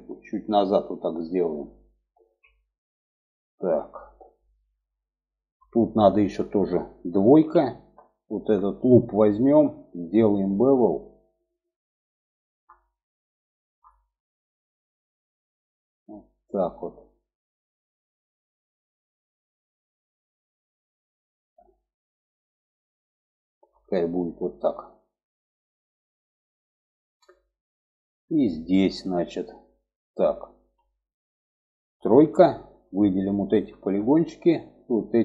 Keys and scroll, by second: 1.5 alt+z, 6.7 2, 31.5 3.